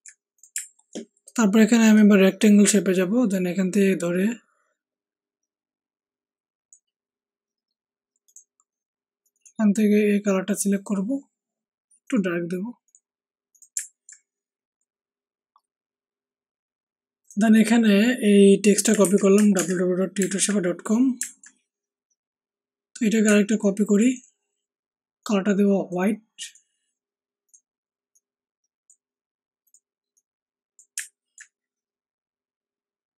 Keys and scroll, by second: 0.5 Down, 19.0 ctrl+c, 19.5 ctrl+alt+Tab, 20.1 ctrl+alt+Tab.